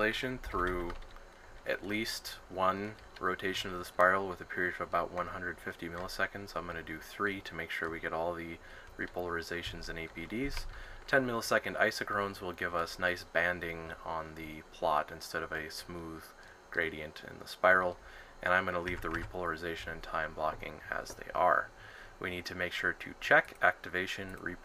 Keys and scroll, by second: 0.2-1.2 typing, 10.2-11.1 typing.